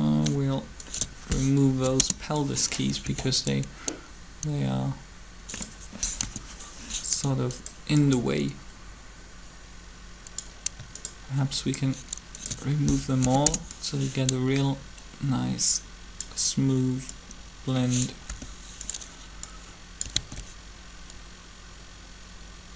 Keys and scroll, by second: 1.7 shift+Delete, 1.8 Return, 3.0 alt+a, 6.0 3, 13.0 shift+Delete, 13.4 Return, 18.3 r, 20.1 alt+a.